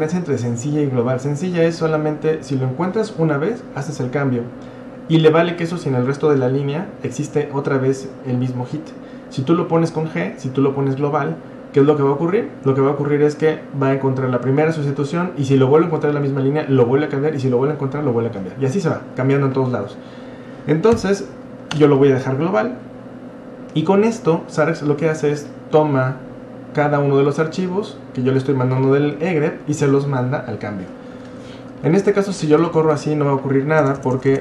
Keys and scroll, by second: 9.0 typing, 21.0-23.0 typing, 31.1-31.6 Left, 32.1 Left, 32.8 Left, 33.8-34.4 typing.